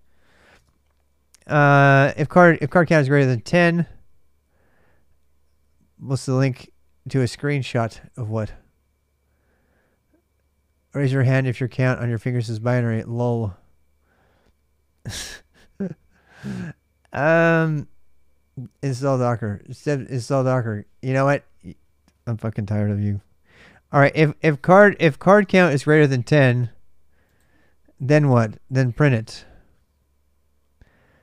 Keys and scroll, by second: 0.3 super+Tab.